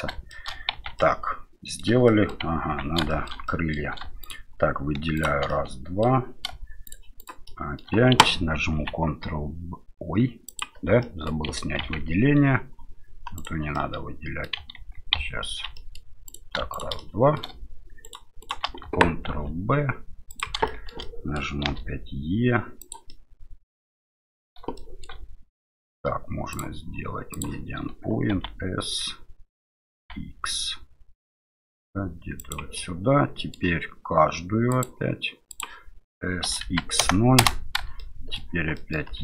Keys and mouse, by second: 0.4 shift+middle click, 0.7 Tab, 1.0 middle click, 2.1 middle click, 2.6 Tab, 3.1 shift+middle click, 3.4 middle click, 4.2 shift+right click, 5.1 shift+right click, 5.5 middle click, 6.8 shift+right click, 7.2 shift+right click, 7.4 shift+middle click, 8.8 ctrl+b, 11.0 click, 11.8 ctrl+z, 13.4 right click, 13.7 middle click, 14.8 ctrl+z, 15.1 ctrl+z, 15.7 middle click, 16.3 right click, 16.7 shift+right click, 17.0 middle click, 18.0 shift+right click, 18.4 shift+right click, 19.3 ctrl+b, 20.8 middle click, 21.1 middle click, 21.7 e, 23.2-24.3 middle drag, 24.8 shift+middle click, 26.7 click, 28.3 s, 32.9 middle click, 34.9 click, 36.4 s, 38.1 middle click, 38.9 middle click, 39.1 e.